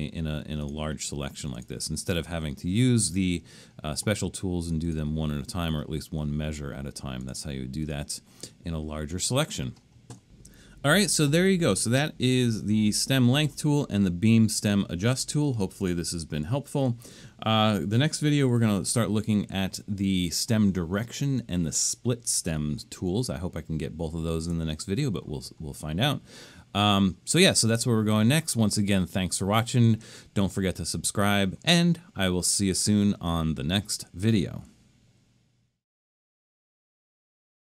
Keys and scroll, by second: 22.4 super+-, 23.1 super+-, 24.4 super+-.